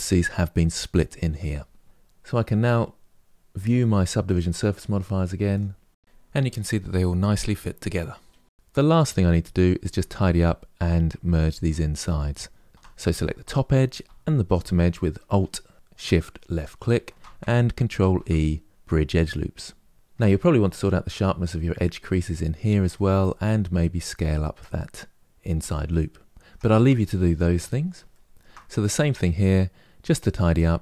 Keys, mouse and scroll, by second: 1.8 click, 2.8 click, 3.2 click, 4.0 click, 4.4 click, 5.2 click, 5.6 middle click, 6.1 Tab, 6.3 middle click, 6.9 Tab, 7.0-8.6 middle drag, 8.6 click, 9.0-9.5 scroll up 3, 9.7 Tab, 13.1 alt+click, 16.2 alt+shift+click, 17.7 ctrl+e, 19.9 Tab, 22.6-25.2 middle drag, 25.2 alt+click, 25.3 s, 26.3 Tab, 26.6-27.3 middle drag, 27.3-27.8 scroll down 1, 27.8-28.5 shift+middle drag, 28.5 click, 28.8-30.3 middle drag, 30.3-30.8 scroll up 2.